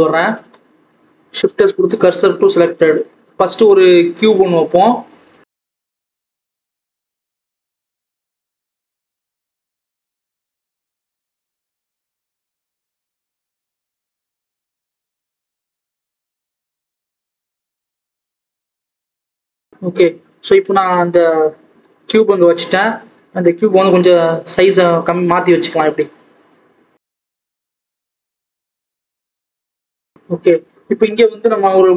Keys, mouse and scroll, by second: 0.0 Tab, 0.4 click, 2.0 shift+s, 2.1 Tab, 2.4 alt+a, 2.7-3.2 scroll down 2, 3.2 click, 3.4-4.3 scroll up 2, 4.3 shift+a, 4.4-4.8 scroll down 1, 4.8-5.3 scroll up 2, 5.6 KP_7, 5.9-6.3 scroll down 2, 6.3 g, 7.2 Tab, 7.3 s, 8.9 Tab, 9.3 click, 9.6-10.1 scroll up 4, 10.1 click, 10.8 KP_7, 10.9 Tab, 11.1 scroll down 3, 11.3 a, 12.4 click, 12.6 scroll up 1, 12.9 1, 13.2 click, 13.3 scroll down 1, 13.5 g, 14.8 click, 14.9 scroll up 1, 15.2 g, 16.1-17.0 scroll down 1, 17.0 click, 17.9 scroll up 1, 18.0 Tab, 18.4 click, 18.5 scroll up 1, 18.7 g, 19.5 scroll down 1, 19.6 alt+a, 20.2 click, 21.4-21.7 scroll up 2, 21.7 click, 22.0-23.2 scroll down 1, 23.2 Tab, 23.7 s, 27.2 s, 28.0 scroll up 2, 28.2-28.5 scroll down 1, 28.5 Tab, 28.8 click, 29.9 scroll down 1, 30.1-30.7 scroll up 2.